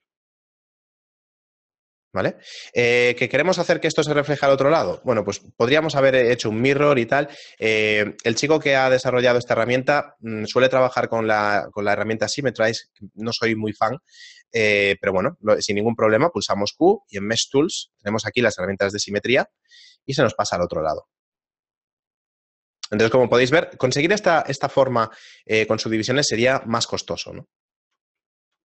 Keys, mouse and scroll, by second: 0.2 shift+middle click, 4.6 right click, 4.9 Tab, 5.7 shift+middle click, 6.6 Tab, 7.1 shift+middle click, 7.9 shift+middle click, 8.8 ctrl+middle click, 9.6 shift+middle click, 14.6 right click, 16.1 q, 20.0 shift+middle click, 20.4 a, 20.9 shift+middle click, 25.0 shift+middle click, 26.8 shift+middle click.